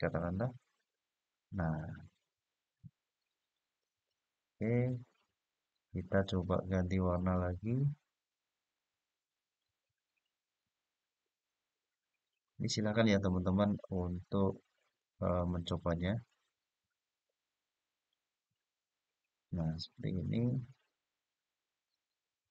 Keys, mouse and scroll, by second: 0.4-2.4 x, 3.5 click, 5.2 click, 8.5-10.4 drag, 12.1-13.7 drag, 14.6 click, 15.8 click, 20.2 click, 22.2 click.